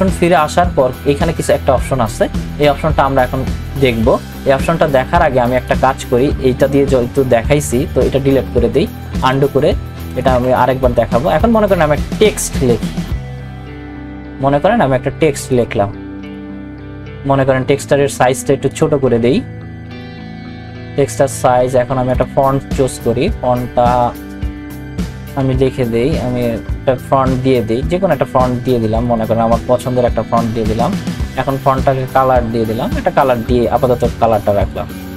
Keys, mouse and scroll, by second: 9.2 click, 15.5 click, 18.7 click, 22.1 click, 24.9-26.0 typing, 29.0 click, 31.9-35.1 drag.